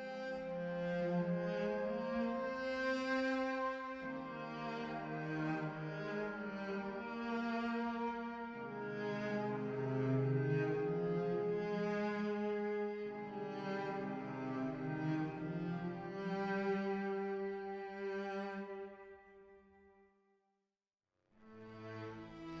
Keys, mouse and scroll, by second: 19.1 0.